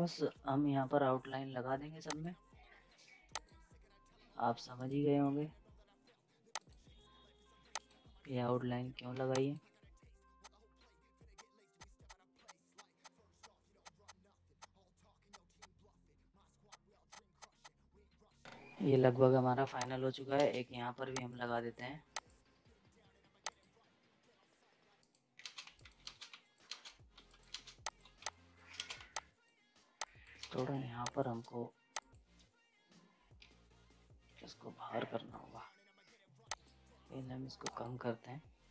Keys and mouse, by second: 0.3 F5, 2.1 click, 4.7 right click, 6.5 click, 9.1 z, 9.3 click, 10.1 F10, 10.4 click, 10.7 z, 10.8 space, 11.0 right click, 11.2 space, 11.2 z, 11.3 click, 11.7 click, 13.3 right click, 13.4 click, 13.5 ctrl+space, 13.7 F10, 13.8 click, 14.4 z, 14.5 click, 14.7 ctrl+space, 15.0 F5, 15.3 click, 17.4 click, 17.8 ctrl+space, 18.0 right click, 18.1 z, 18.3 ctrl+space, 18.3 right click, 18.3 ctrl+space, 18.4 z, 19.8 click, 20.3 ctrl+space, 21.1 click, 25.0 right click, 25.4 ctrl+space, 25.6-28.9 typing, 25.7 right click, 26.0 ctrl+space, 26.4 right click, 26.7 ctrl+space, 27.2 right click, 27.8 click, 28.3 click, 28.7 ctrl+space, 29.1 click, 30.4 ctrl+space, 31.0 click.